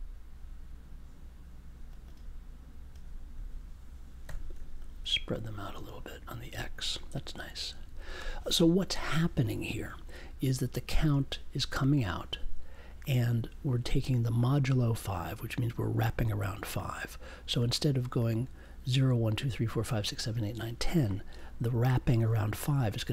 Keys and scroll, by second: 4.2 5.